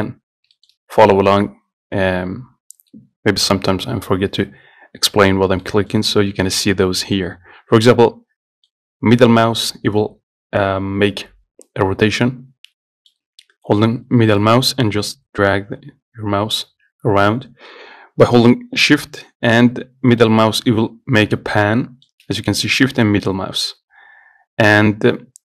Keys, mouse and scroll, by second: 0.3 scroll up 1, 0.4 scroll down 2, 0.8-4.2 shift+middle drag, 4.2-4.7 scroll up 2, 5.9-12.0 middle drag, 13.4 scroll down 2, 14.6-23.4 middle drag.